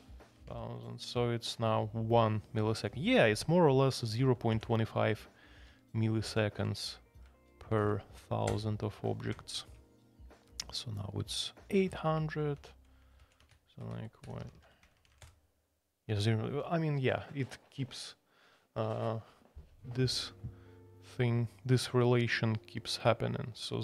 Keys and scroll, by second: 0.3 Escape, 5.6 alt+p, 5.8 typing, 6.2 alt+p, 7.7 alt+n, 8.5 Return, 12.5 alt+p, 13.2 alt+p, 13.2-15.6 typing, 17.7 typing.